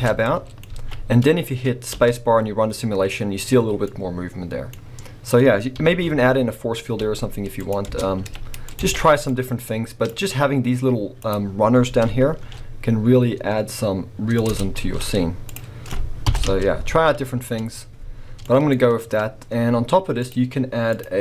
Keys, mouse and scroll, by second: 0.0 Tab, 0.2 middle click, 0.7 alt+a, 1.9 space, 3.0-4.8 middle drag, 7.0 space, 7.6 click, 7.9 b, 9.3 click, 9.9 click, 10.2-11.3 scroll up 1, 11.3 click, 14.5 Tab, 14.8 z, 16.3 Left, 16.4 space, 18.5-20.3 middle drag, 20.3 click, 21.0-21.2 drag.